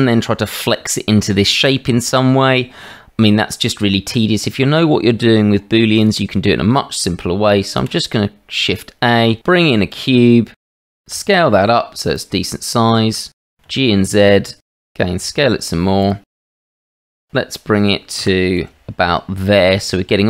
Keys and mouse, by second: 7.8 shift+a, 8.2 shift+a, 11.1 s, 13.4 g, 15.2 s, 16.3 g, 17.1 shift+z, 18.2 g.